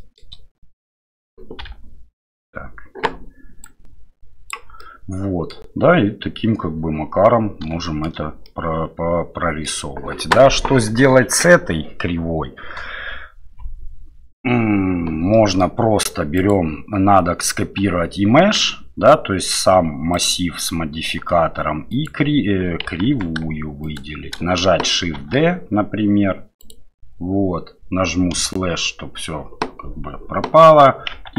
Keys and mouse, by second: 4.8-5.5 middle drag, 7.8 shift+middle drag, 8.4-9.7 middle drag, 15.4 middle click, 16.4 right click, 20.1-21.3 drag, 21.9 shift+click, 23.1 ctrl+z, 23.8 shift+click, 25.3 shift+d, 31.1 Tab.